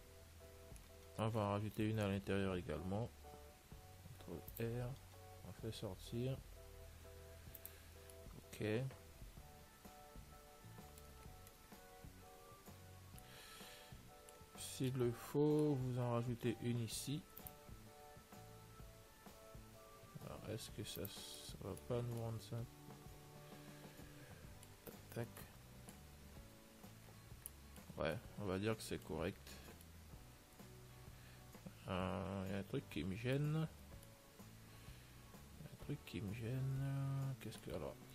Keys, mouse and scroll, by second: 3.6 ctrl+r, 8.3-10.3 middle drag, 11.5-13.9 middle drag, 14.1-17.3 middle drag, 17.3 ctrl+r, 17.3-20.7 drag, 22.2 Tab, 22.2-24.1 middle drag, 26.6-32.0 middle drag, 34.0 Tab, 34.0-36.2 middle drag, 37.8-38.1 middle drag.